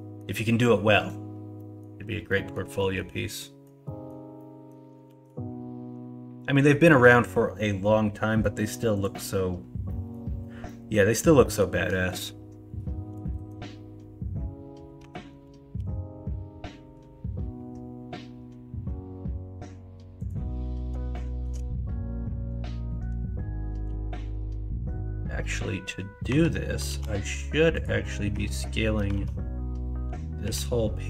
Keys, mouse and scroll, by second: 0.9 middle drag, 1.5 middle click, 2.2 middle drag, 2.7 middle click, 3.3 middle click, 3.8 middle click, 4.3 middle click, 5.0 shift+a, 9.8 drag, 10.6 drag, 11.2 click, 11.8 click, 13.1 KP_1, 13.3 KP_3, 15.0 Tab, 15.7 g, 21.1 shift+middle click, 26.2 Tab, 26.8 alt+z, 28.3 Tab, 29.1 alt+z, 30.4 l.